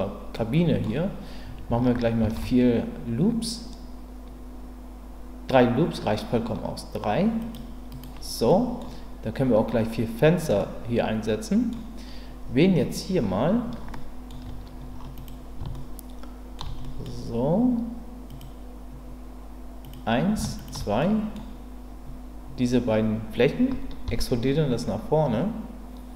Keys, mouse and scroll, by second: 0.4 middle click, 2.2 ctrl+r, 8.5 middle click, 10.6-11.7 middle drag, 13.9 middle click, 15.2 click, 15.7 shift+middle click, 16.8 middle click, 18.3 click, 20.6 shift+click, 21.0 middle click, 24.0 e.